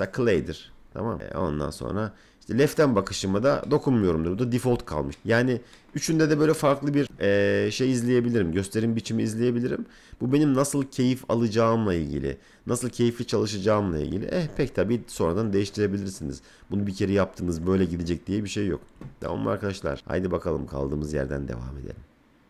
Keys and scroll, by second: 14.2 F3.